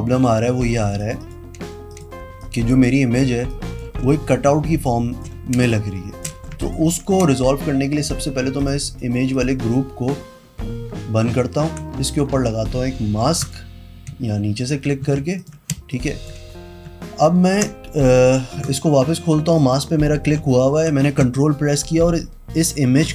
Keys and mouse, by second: 1.0 click, 1.2 click, 1.4 click, 2.1 click, 2.4 space, 2.6 click, 3.7 click, 5.0 space, 5.0 click, 5.8 space, 5.9 click, 6.8 alt+click, 8.8 click, 9.5 click, 11.4 ctrl+KP_Subtract, 13.6 click, 15.1 z, 15.6 alt+click, 15.9 space, 16.1 click, 18.8 click, 19.7 click.